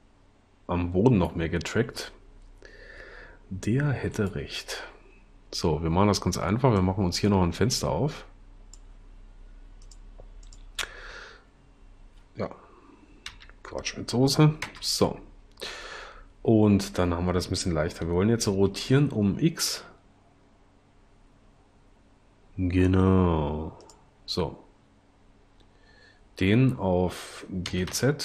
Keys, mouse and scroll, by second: 13.5 t, 14.7 0, 18.7 r, 19.7 x, 27.6 g, 28.0 z.